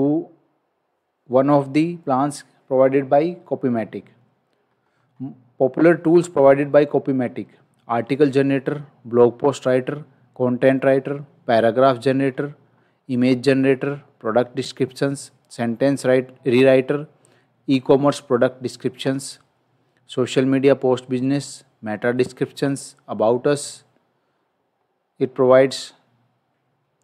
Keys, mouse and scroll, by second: 13.8-14.2 scroll down 1.